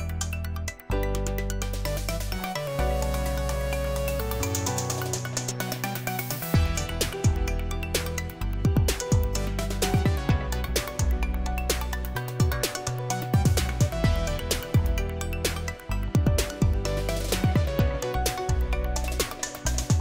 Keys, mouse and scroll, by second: 2.6-9.6 typing, 10.6-19.3 typing.